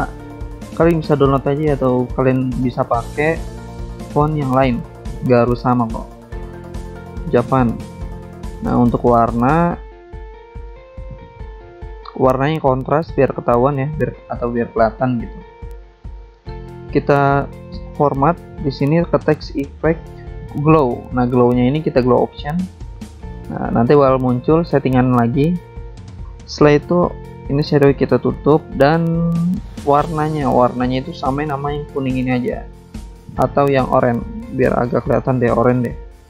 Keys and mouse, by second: 0.6 click, 0.7 click, 1.4 click, 1.5 click, 2.3 alt+Tab, 2.8 alt+click, 3.4 click, 5.5 click, 6.2 click, 6.9 alt+Tab, 7.5 click, 8.2-9.2 typing, 10.3 click, 10.5 click, 10.7 click, 11.0 click, 11.2 click, 11.4 double click, 12.7 double click, 14.0 alt+Tab, 14.4 alt+Tab, 16.3 click, 16.4 click, 17.4 click, 17.5 click, 18.5 click, 23.7 click, 23.9 click, 25.0 click, 25.2 click, 26.0 click, 26.1 click, 28.1 click, 33.4 click, 35.2 click.